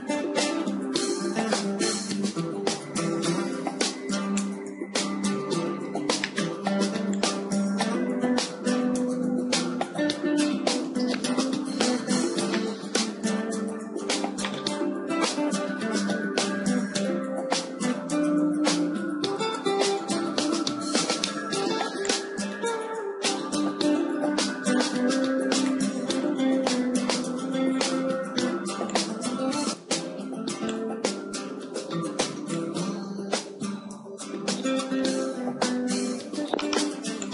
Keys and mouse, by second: 4.6-6.6 drag, 5.7 shift+d, 7.4-9.4 drag, 8.5 r, 8.6 r, 12.4-17.0 middle drag, 16.0 KP_1, 17.0-19.0 drag, 17.0 KP_1, 17.3 KP_1, 19.0 KP_3, 20.6 r, 22.4-24.4 drag, 24.4 a, 25.0 b, 27.1 r, 29.4 click, 29.6 b, 31.2 a, 32.1 b, 35.5 shift+d.